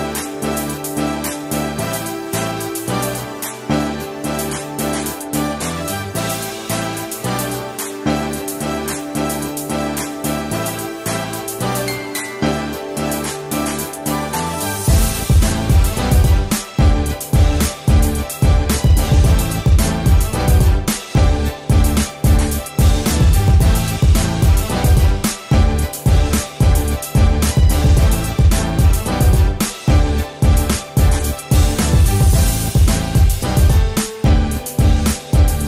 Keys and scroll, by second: 25.4 i.